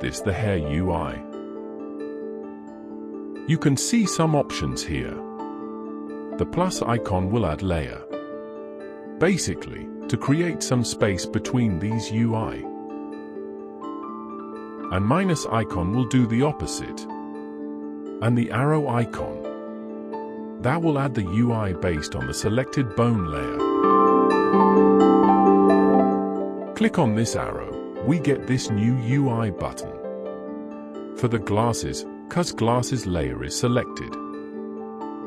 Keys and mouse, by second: 27.5 click.